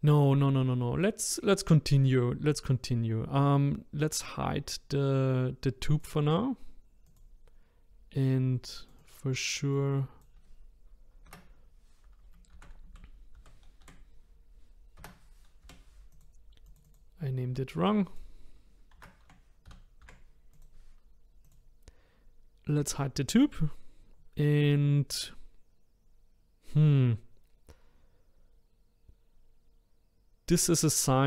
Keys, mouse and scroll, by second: 0.4-2.5 middle drag, 2.5 click, 5.9 click, 7.1 click, 8.8 click, 9.0-12.1 drag, 16.7 click, 16.8-20.0 drag, 21.5 click, 23.3 click.